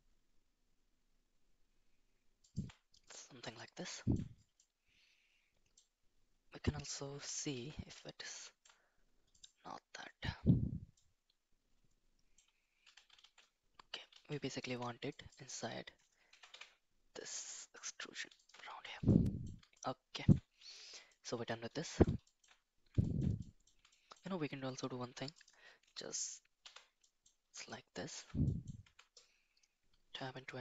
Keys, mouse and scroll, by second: 3.0 middle click, 3.9 shift+middle click, 4.6-5.7 middle drag, 7.1 KP_7, 7.5 shift+z, 8.3 shift+middle click, 10.9-12.3 middle drag, 12.8 KP_7, 13.2 shift+z, 14.1 shift+z, 14.6 Tab, 15.0 click, 16.2 g, 18.7 shift+z, 19.1 middle click, 19.7 middle click, 21.0 middle click, 21.8 middle click, 22.2 shift+middle click, 23.0 shift+middle click, 23.4 middle click, 23.8 shift+middle click, 25.1 Tab, 26.6 /, 27.0 middle click, 27.6 shift+middle click, 28.4 middle drag, 28.8 Tab.